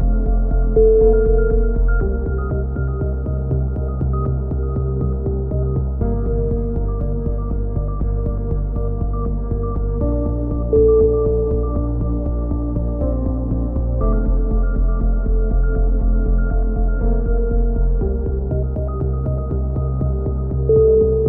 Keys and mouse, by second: 0.0 click, 1.7 b, 3.1 e, 3.8-4.8 drag, 6.3 c, 6.9 click, 7.7 click, 9.6 c, 10.2 click, 11.0 click, 12.1 click, 13.5 click, 15.8-16.8 drag, 18.5 ctrl+z, 19.1 a, 19.3-20.7 drag, 20.4 KP_7.